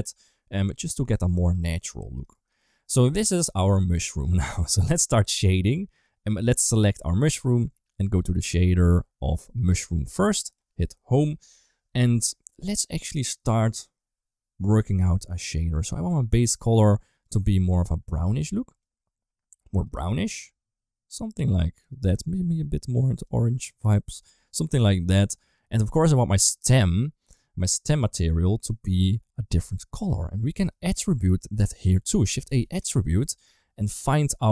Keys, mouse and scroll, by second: 0.7 middle drag, 1.4 ctrl+s, 2.2 shift+middle drag, 8.0 click, 9.5 click, 9.8 click, 10.3 click, 11.2 Home, 12.4 middle click, 17.1 click, 18.1 click, 30.5 middle click, 32.0 shift+a, 33.7-34.5 drag.